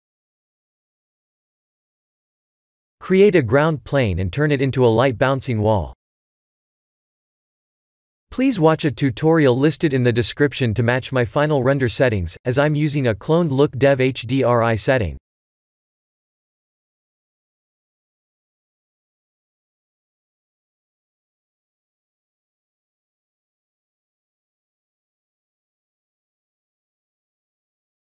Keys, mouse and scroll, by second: 0.3 click, 0.7-1.2 scroll up 1, 1.3 scroll down 1, 1.9 click, 3.7 ctrl+s, 4.1 shift+a, 6.8 s, 13.7 click, 14.7 click, 15.2 b, 17.9 click, 20.2 click, 24.5 click, 26.0 click.